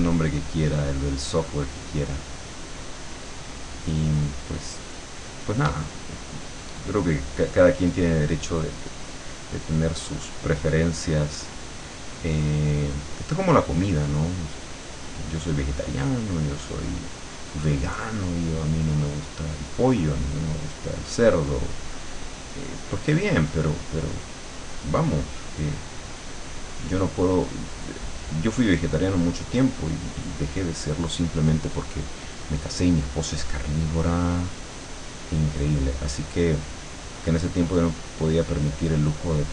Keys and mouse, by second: 6.5 click, 10.2 click, 10.7-11.9 drag, 12.5 click, 13.8 click, 15.0 click, 16.4 click, 18.4-21.5 drag, 22.4-30.8 drag, 32.0-33.5 drag, 34.2-39.5 drag.